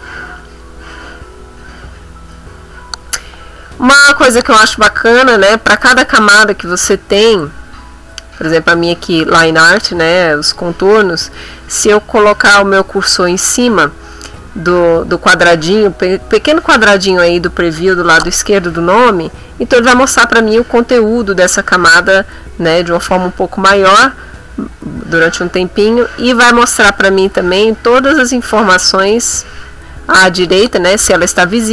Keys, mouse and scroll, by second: 4.6 click, 7.3 click.